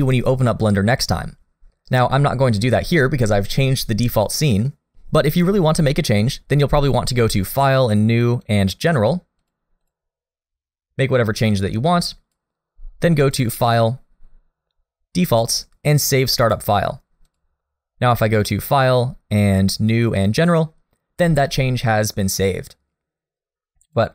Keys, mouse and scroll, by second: 11.5 click, 13.3 click, 18.4 click, 22.4 click.